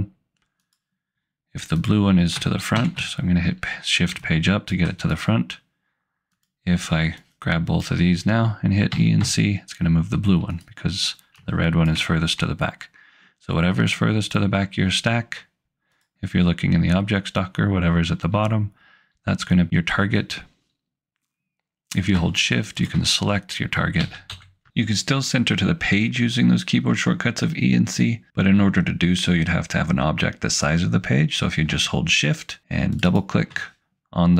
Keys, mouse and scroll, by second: 0.6 click, 2.8 shift+Page_Up, 4.2 click, 8.9 e, 9.2 c, 10.6 click, 11.5 ctrl+click, 13.8 click, 22.8 shift+click, 24.0 e, 24.3 c, 33.1 click.